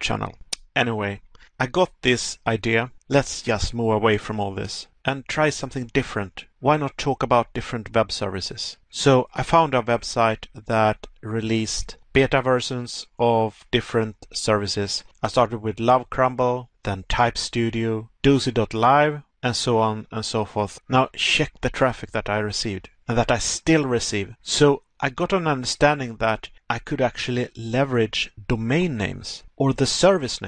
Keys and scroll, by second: 2.5 Pause, 4.5 Pause, 6.4 Pause, 8.7 Pause, 14.7 Pause, 16.3 Pause, 17.8 Pause, 21.0 Pause, 23.2 Pause, 25.0 Pause, 30.2 Pause.